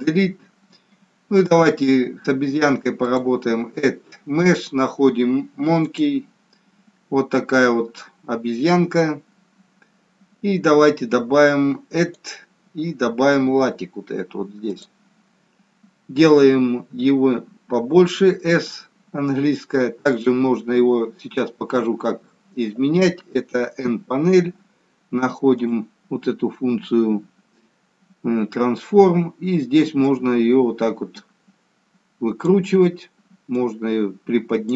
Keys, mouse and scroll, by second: 0.0 Delete, 3.0 click, 8.6-11.6 scroll up 5, 11.9 click, 18.9 s, 23.8 n, 25.4 click, 29.9 click, 33.5 click.